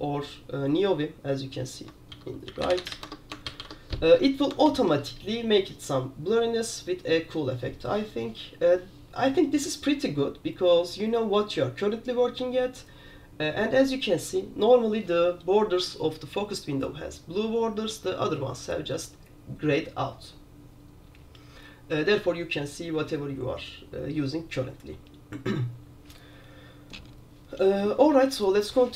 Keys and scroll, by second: 2.2 super+j, 2.3-4.0 typing.